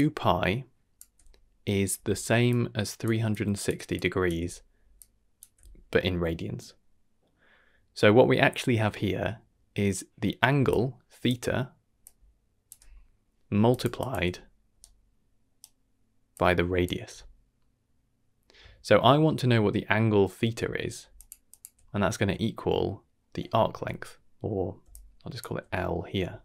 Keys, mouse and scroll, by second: 0.9-4.3 typing, 2.4 click, 3.3 click, 3.9 click, 4.9 click, 5.4 d, 5.5 d, 8.9 shift+middle click, 10.5-16.8 typing, 10.6 click, 12.0 click, 13.7 click, 14.0 click, 14.8 right click, 16.3 click, 21.1 click, 21.5 click, 21.6 d, 21.6 d, 22.0 shift+middle click, 22.7 middle click, 24.8 d, 24.9-25.4 drag, 25.4 d, 25.8 middle click, 25.8 d, 26.2 d.